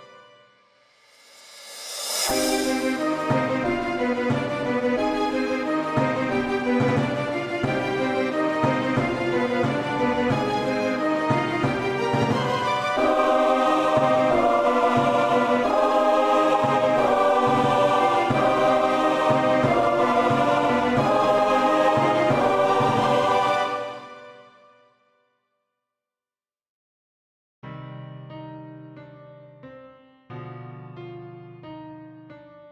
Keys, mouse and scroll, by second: 4.1 click, 8.2 ctrl+a, 10.8 click, 14.5 click, 16.6-17.0 typing, 19.3 Return, 24.7 click, 27.6-30.0 typing, 30.5 Return.